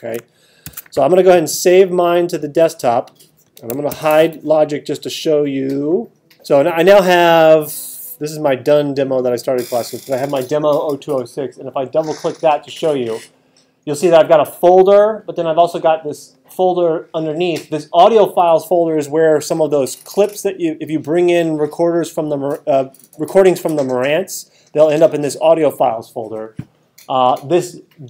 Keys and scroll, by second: 0.6 alt+super+8, 3.9 super+h, 6.3 super+h.